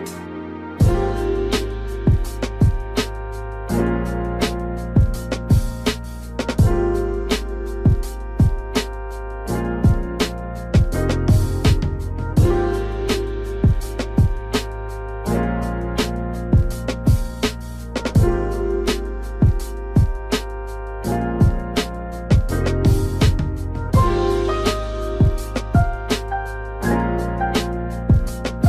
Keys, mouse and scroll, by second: 8.0 space, 11.8 click, 17.5 z, 18.9 ctrl+click, 19.6 ctrl+right click, 20.7 click, 25.4 ctrl+click, 27.1 click.